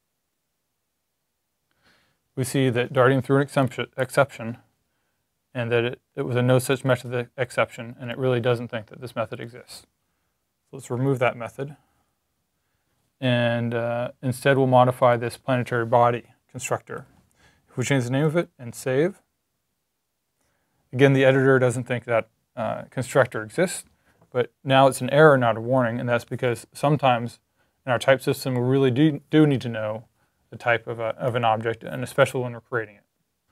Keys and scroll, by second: 10.5 super+z, 11.6 super+s, 16.9 a, 18.1 super+s.